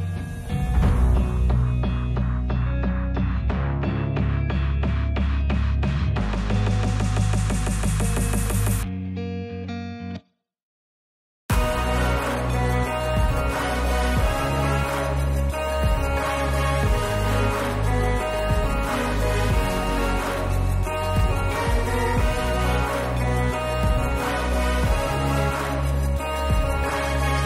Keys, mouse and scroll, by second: 0.2 ctrl+r, 2.9 middle click, 3.6 shift+middle click, 4.2-4.6 drag, 5.1 s, 6.0 click, 6.6 click, 7.1 s, 7.8 click, 7.9 Tab, 8.5 Tab, 9.0 click, 9.7 s, 10.4 click, 10.9 click, 11.6 s, 12.3 Tab.